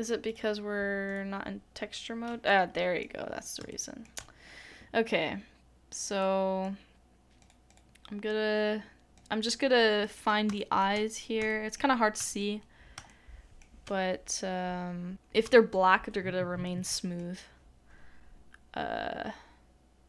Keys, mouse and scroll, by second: 2.4 middle click, 3.2-3.6 scroll up 1, 3.7 shift+middle click, 6.2 shift+middle click, 7.7 double click, 10.0 double click, 10.5 shift+middle click, 10.9-11.4 shift+scroll up 3, 11.5 shift+middle click, 15.1 shift+middle click, 16.6 middle click.